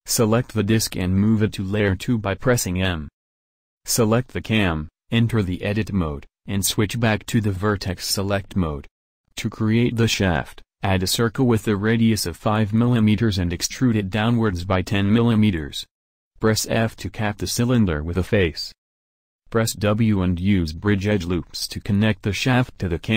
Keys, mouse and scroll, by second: 1.4 m, 3.0 Tab, 4.5 Tab, 10.3 shift+a, 15.4 e, 17.5 f, 20.3 a, 22.4 w.